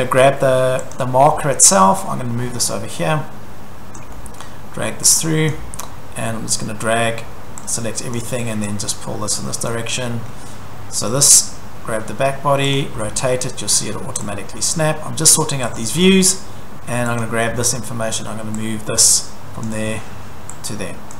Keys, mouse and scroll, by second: 1.0 click, 1.3 scroll, 4.0 click, 4.4 scroll, 5.5 click, 5.6 Escape, 8.1 click, 9.6 click, 9.9 Escape, 10.2 scroll, 12.8 click, 15.3 click, 15.8 click, 16.0 Escape, 16.0 middle click, 16.2-17.2 scroll, 17.2 click, 17.5-17.8 scroll, 19.6 click, 21.1 click.